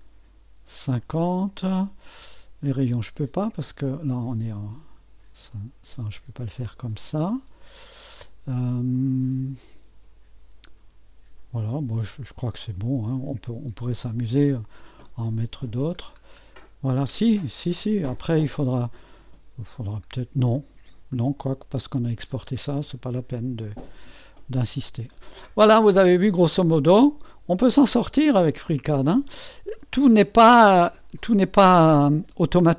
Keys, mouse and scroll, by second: 1.5 middle click, 1.5 scroll down 1, 6.4-8.0 drag, 13.4-13.9 scroll up 2, 15.5 scroll down 2, 17.5-19.2 scroll up 2, 18.1 click, 24.2-25.7 scroll down 2, 27.9 middle click, 29.0 scroll down 2.